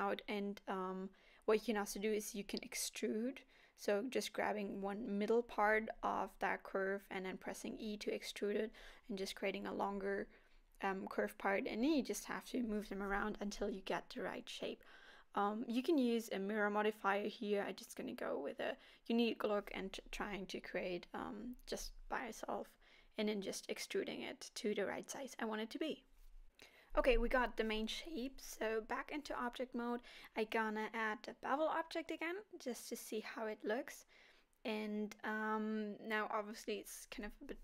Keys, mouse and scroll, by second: 0.1 click, 0.3 g, 0.6 click, 0.8 scroll down 4, 1.0 click, 1.3 g, 1.8 scroll up 5, 2.1 scroll down 1, 2.3 scroll down 1, 2.5 click, 2.8 g, 3.4 click, 3.6 g, 4.1 e, 4.9 e, 6.3 click, 6.6 g, 7.2 click, 7.5 g, 8.4 click, 8.7 g, 9.4 click, 9.7 g, 10.8 click, 11.0 g, 11.5 click, 11.9 g, 12.7 click, 13.0 click, 13.2 g, 13.8 click, 13.9 g, 14.8 click, 14.9 g, 16.2 click, 16.5 g, 18.6 click, 18.7 click, 18.9 g, 19.5 click, 20.0 g, 20.2 click, 20.5 click, 20.9 click, 21.0 g, 21.6 click, 21.8 g, 22.3 click, 22.3 g, 23.6 g, 24.0 click, 24.3 g, 25.2 click, 25.5 g, 26.0 click, 26.2 g, 26.9 click, 27.3 g, 28.7 scroll down 2, 29.0 Tab, 29.3 middle click, 32.0 click, 34.7 click, 36.1 middle click.